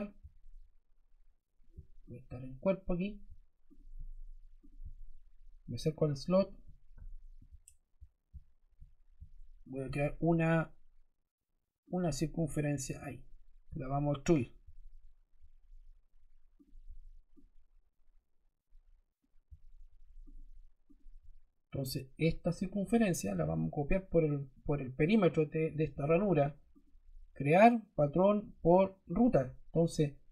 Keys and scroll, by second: 13.6 e.